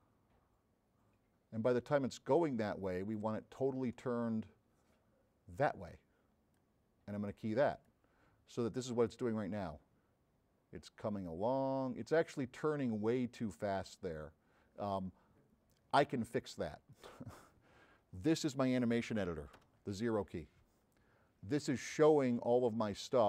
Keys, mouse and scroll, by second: 8.6-10.7 middle drag, 10.7-15.2 drag, 17.0 click.